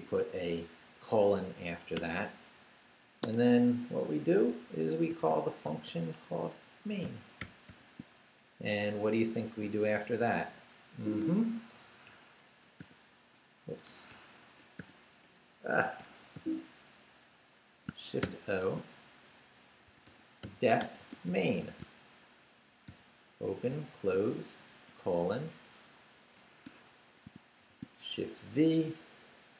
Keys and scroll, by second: 2.0 Return, 3.2 Tab, 4.9-6.4 typing, 7.4 shift+9, 7.7 shift+0, 8.9 shift+Up, 12.8 shift+o, 13.8 shift+BackSpace, 14.2 Escape, 14.8 shift+o, 15.8 shift+Escape, 16.4 u, 18.2 shift+o, 20.1-23.7 typing, 24.9 shift+;, 26.4 Down, 26.7 Escape, 27.3 shift+Escape, 27.6 shift+v, 28.0 shift+Down, 28.9 Down.